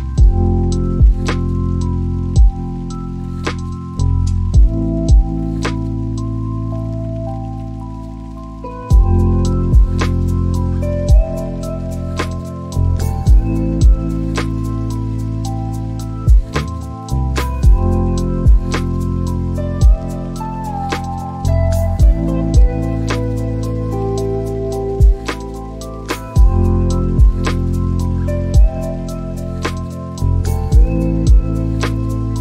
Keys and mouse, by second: 2.8 click, 7.6 click, 24.4 shift+middle click, 26.1 shift+middle click, 31.8 click.